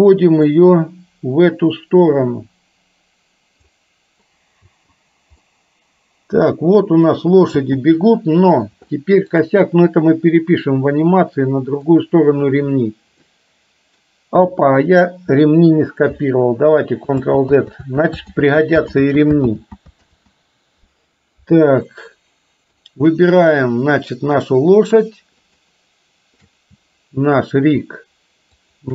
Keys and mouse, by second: 0.6-3.7 drag, 4.7 space, 5.5-7.1 middle drag, 7.7 space, 8.1-8.6 middle drag, 9.0-9.4 shift+middle drag, 11.2-12.0 middle drag, 12.9-14.1 middle drag, 17.1 ctrl+z, 17.7 ctrl+z, 18.4 ctrl+z, 19.0 ctrl+z, 19.6 ctrl+z, 20.1 ctrl+z, 22.0-22.7 middle drag, 23.6 click, 25.4 shift+click, 28.7 shift+click.